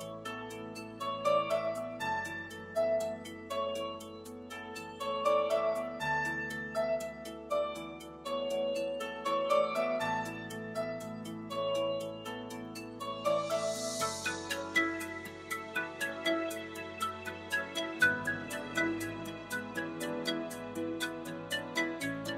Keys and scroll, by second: 9.4 ., 9.8 2, 10.8 Home.